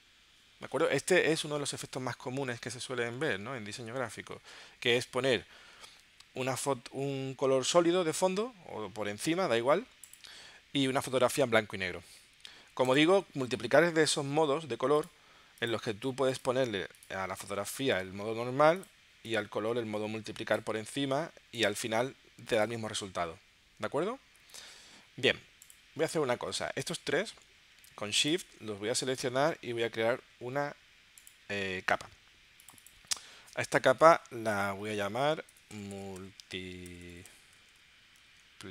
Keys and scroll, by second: 35.5-38.3 typing.